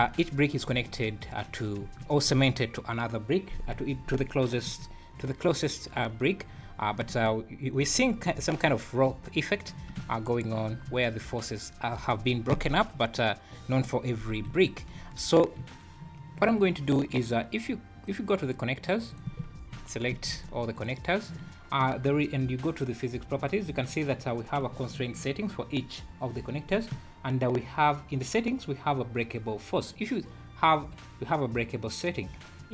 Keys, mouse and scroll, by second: 0.0 `, 0.7 `, 1.5-1.8 scroll up 3, 1.8 `, 4.6 space, 5.9-6.4 scroll down 3, 6.5 Escape, 7.0 space, 7.8 space, 10.2 shift+right click, 11.4 scroll down 2, 12.5 space, 14.5 Escape, 14.9 space, 15.6 Escape, 18.6 click, 19.1 click, 20.1 shift+g, 32.6-32.7 scroll up 3.